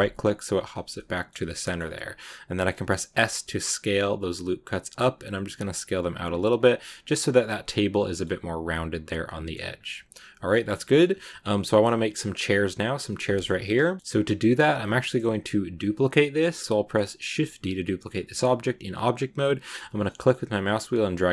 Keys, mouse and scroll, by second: 0.8 shift+middle click, 1.2 scroll down 2, 1.4 middle click, 1.9-2.9 scroll up 2, 2.9 s, 6.5 Tab, 6.8 s, 7.6 scroll down 4, 7.8-9.6 middle drag, 9.6 scroll down 2, 9.7 middle click, 10.5 scroll down 2, 10.7 middle click, 10.9 scroll up 2, 11.1-14.1 middle drag, 14.1 scroll down 2, 14.7 scroll up 1, 14.7 scroll down 1, 14.9 shift+middle click, 15.6-17.2 scroll down 2, 17.2 shift+d.